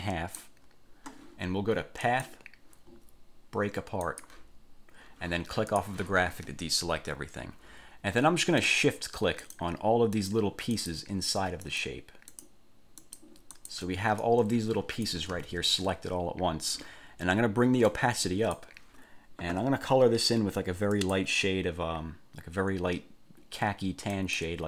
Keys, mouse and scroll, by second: 2.2 click, 4.2 click, 5.9 click, 9.6 shift+click, 10.4 shift+click, 10.9 shift+click, 11.9 shift+click, 12.5 shift+click, 13.2 shift+click, 13.7 shift+click, 14.4-15.5 shift+drag, 15.5 ctrl+z, 18.1 click, 21.1 click, 24.3 click.